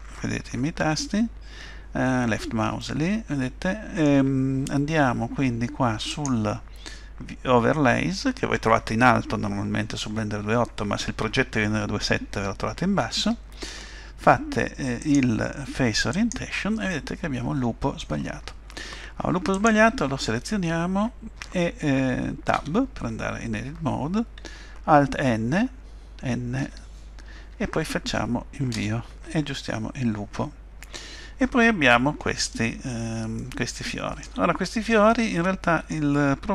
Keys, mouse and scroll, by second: 2.8 middle click, 6.1 click, 15.0 click, 16.9 middle click, 19.5 click, 22.5 Tab, 26.6 alt+n, 32.8-33.1 scroll up 1, 33.4 shift+middle click, 35.1 middle click.